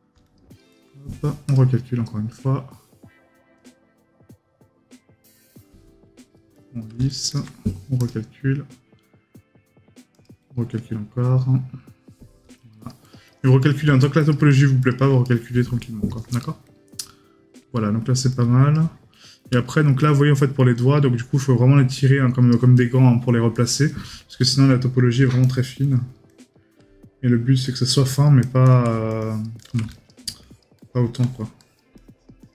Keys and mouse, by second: 13.6 right click, 15.2 right click, 22.8 right click.